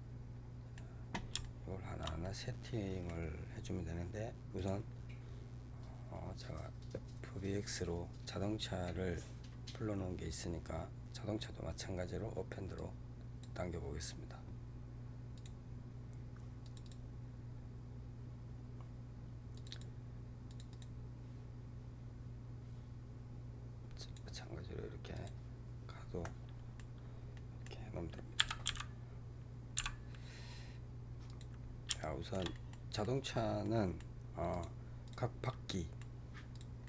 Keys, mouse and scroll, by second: 4.4-7.5 drag, 23.9 click, 25.0 click, 26.1-26.9 middle drag, 26.9 scroll down 2, 27.2-28.3 middle drag, 28.3 g, 31.6 scroll down 2, 31.9-32.9 shift+middle drag, 32.9-33.3 scroll up 4, 33.5-34.4 middle drag, 34.4 click, 35.0 click, 35.6-36.4 middle drag, 36.4 click, 36.7-36.8 middle drag.